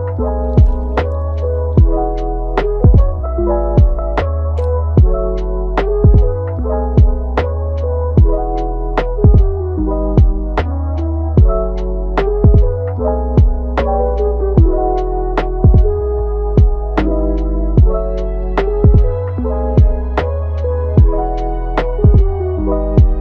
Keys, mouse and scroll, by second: 0.8-2.1 middle drag, 2.1 click, 2.5 g, 3.2-4.1 middle drag, 4.1 g, 5.0 middle click, 5.7 click, 6.4 middle click, 7.1 click, 7.4 g, 8.3-8.9 middle drag, 8.9 click, 9.3 g, 10.8-11.3 middle drag, 11.3-11.7 scroll up 1, 11.7-12.2 middle drag, 12.2 scroll up 1, 12.3-12.8 middle drag, 12.8 g, 13.7-14.3 middle drag, 14.3 scroll up 1, 14.5-15.3 middle drag, 15.3 alt+s, 17.6-18.1 middle drag, 18.1 g, 19.9 click, 20.9 click, 21.4 click, 21.7 g.